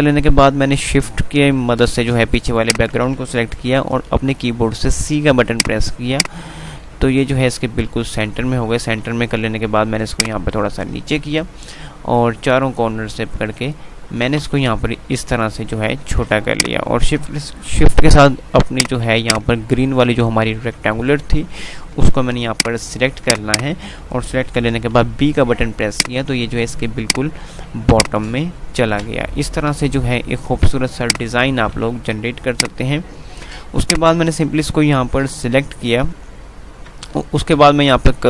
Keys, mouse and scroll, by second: 2.7 shift+click, 4.2 c, 5.6-8.3 drag, 8.3 ctrl+r, 10.2-13.7 shift+drag, 13.7 ctrl+r, 16.7 click, 18.7 click, 20.7 ctrl+z, 22.2 ctrl+u, 22.6 click, 23.7 click, 24.8 b, 26.1-31.3 drag, 31.7 c, 32.6 click, 37.0 F3.